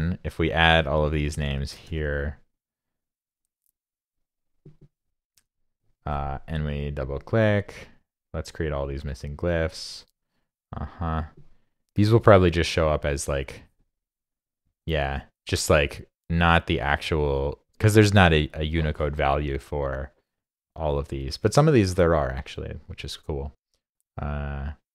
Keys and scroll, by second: 1.9 super+v.